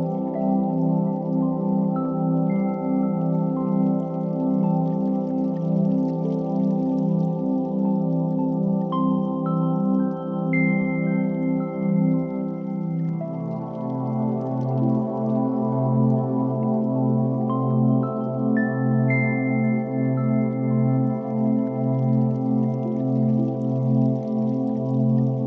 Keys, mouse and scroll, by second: 0.3 click, 1.2 KP_1, 2.9 g, 3.1 x, 3.4 click, 3.8 shift+d, 3.9 x, 6.6 click, 7.3 shift+r, 9.2 s, 9.7 click, 9.9 g, 10.1 x, 10.8 click, 13.1 shift+middle click, 16.0-17.6 drag, 20.9 shift+d, 21.1 x, 22.3 click, 23.2 KP_7, 24.0 r.